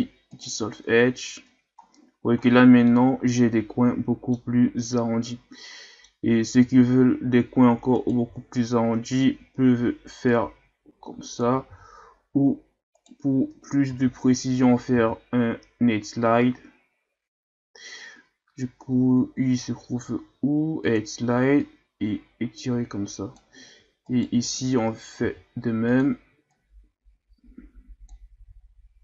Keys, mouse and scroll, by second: 1.3 Tab, 1.8-2.1 scroll down 2, 2.9-4.9 middle drag, 4.9-5.6 scroll up 4, 5.6 middle click, 6.3-6.6 scroll up 2, 6.6 Tab, 8.0 alt+right click, 10.3-11.7 drag, 11.7 ctrl+e, 13.9 ctrl+z, 14.9 ctrl+e, 24.1 alt+right click, 25.2 ctrl+e, 28.4 Tab, 28.8 scroll down 1.